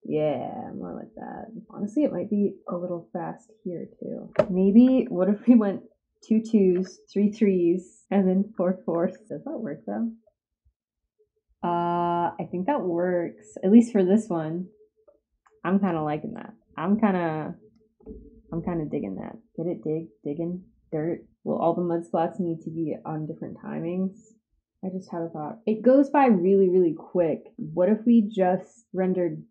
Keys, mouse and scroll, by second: 2.0-3.5 drag, 22.2-25.1 drag, 27.4-29.5 drag.